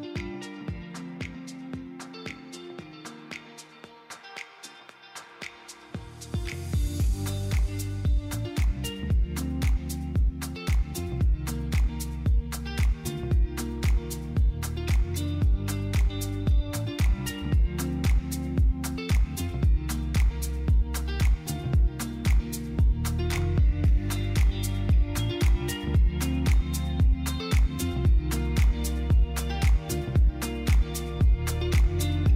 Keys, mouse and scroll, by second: 0.7 click, 3.4 click, 3.8 click, 6.3 click, 6.9 ctrl+r, 9.6 click, 12.2 click, 14.7 click, 15.3-19.8 drag, 30.4 click, 31.9-32.3 drag.